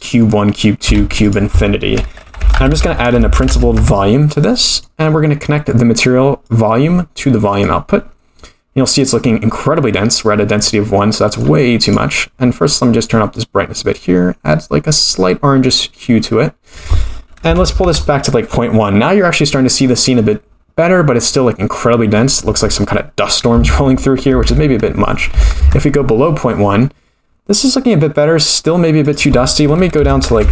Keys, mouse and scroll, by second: 0.0 middle click, 1.0 shift+a, 3.5 Down, 5.1-6.4 scroll up 7, 5.4 middle click, 6.4-7.6 drag, 9.8 middle click, 10.6-11.3 scroll up 4, 11.3 middle click, 11.8 click, 16.6-19.8 drag, 22.1-26.9 drag, 29.0-30.5 drag, 30.4 0.